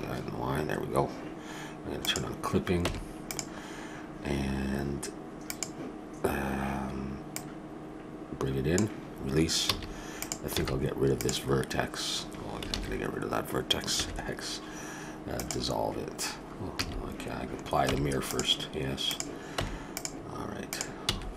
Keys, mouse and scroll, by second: 2.0 click, 2.8 Tab, 3.8-5.4 middle drag, 7.4-9.1 drag, 9.7 a, 10.2-12.1 drag, 10.6 x, 12.7 ctrl+z, 14.0 x, 16.7 a, 17.9 Tab, 19.0-20.2 drag, 19.5 Tab, 21.1 x.